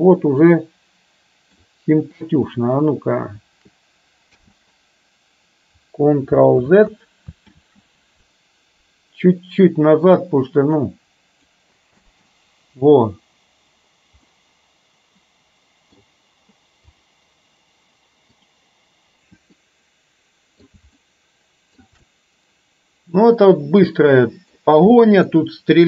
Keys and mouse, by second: 0.4-1.8 middle drag, 4.4 space, 6.8 ctrl+z, 7.6 ctrl+z, 10.4-11.5 drag, 12.1 space, 14.4-16.0 middle drag, 18.5 drag, 19.6-20.8 middle drag, 21.1-21.9 shift+middle drag, 22.1-24.8 middle drag, 25.0-25.4 middle drag.